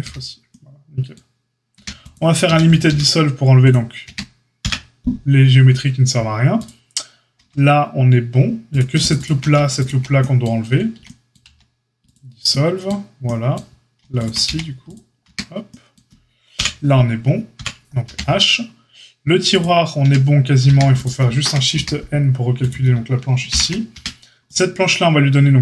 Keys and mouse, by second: 0.0 f, 1.7 a, 2.4 a, 2.8 q, 4.0 Tab, 4.6 KP_Divide, 6.5 click, 7.4 Tab, 8.6 click, 8.7 alt+shift+middle click, 9.0 alt+shift+click, 9.2-9.7 alt+shift+middle drag, 9.7 alt+shift+click, 9.8-24.4 alt+shift+middle drag, 11.4 x, 15.2 Tab, 16.5 KP_Divide, 17.5 KP_Divide, 18.0 h, 19.9 Tab, 21.2 a, 21.7 a, 23.4 shift+n, 23.9 Tab, 24.4 click, 24.5-25.6 middle drag.